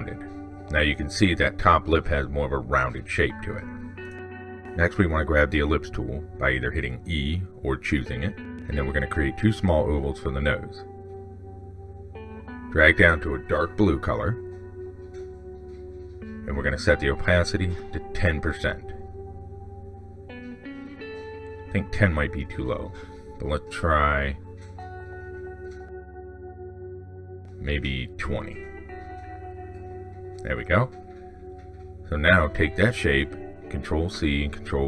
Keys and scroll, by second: 33.7 ctrl+c, 33.9 ctrl+v.